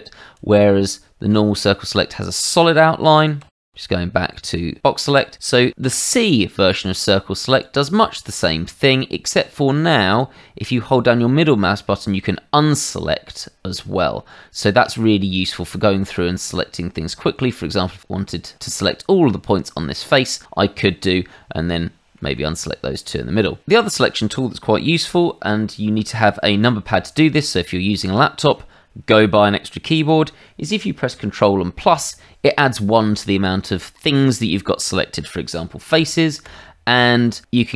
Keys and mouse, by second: 0.3 click, 3.4 w, 3.7 w, 4.4 w, 5.8 c, 7.6 click, 9.8 middle click, 15.3 click, 22.1 middle click, 31.8 ctrl+KP_Add, 36.0 ctrl+KP_Add, 36.4 ctrl+KP_Add, 36.9 ctrl+KP_Add, 37.6 middle click.